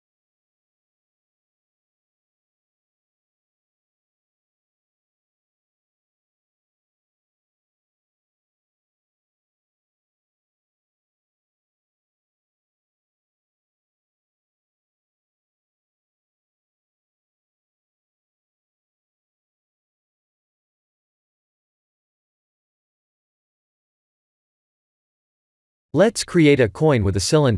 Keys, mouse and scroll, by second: 5.6 shift+middle click, 10.4 shift+`, 16.4 shift+`, 18.6 KP_0, 19.5-20.7 scroll down 7, 20.7 scroll down 2, 22.7 click, 23.8 click, 25.1 scroll down 4, 25.8 click, 26.1 shift+a.